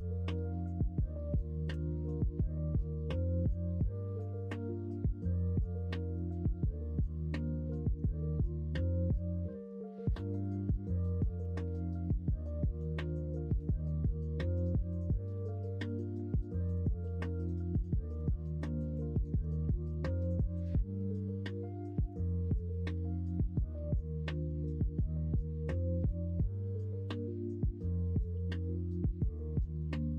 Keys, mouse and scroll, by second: 1.8 ctrl+KP_Subtract, 2.4-2.9 middle drag, 3.4 middle drag, 4.2-6.1 middle drag, 7.4-10.4 middle drag, 13.8-15.4 middle drag, 15.6 middle click, 16.5 middle click, 18.1 middle drag, 19.4 middle click, 21.2-22.0 middle drag, 22.5 middle drag, 23.2 Tab, 24.4-28.7 drag, 29.0 scroll up 1, 29.5 shift+middle click, 29.7 shift+scroll down 1.